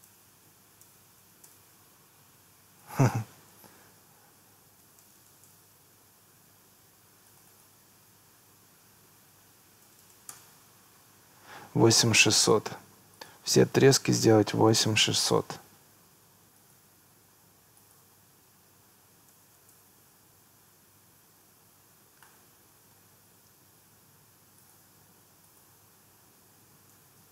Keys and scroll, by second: 0.1 BackSpace, 0.5 8, 1.5 Return, 4.0 8, 4.8 7, 5.1 0, 5.5 Return, 9.2 8, 10.3 Return, 14.3 8, 15.4 Return, 18.9 8, 19.8 Return, 26.3 8, 26.8 6.